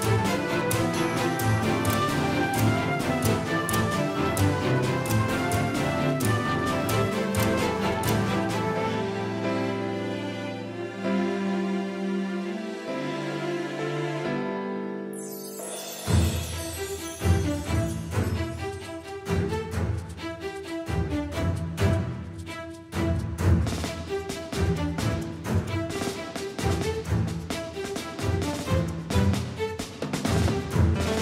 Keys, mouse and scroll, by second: 1.2 middle click, 1.7-4.0 drag, 5.6-8.8 middle drag, 8.8-10.7 right drag, 10.7 r, 17.9-20.7 drag, 20.9 z, 22.6 middle click, 26.0-29.7 drag, 29.7 z.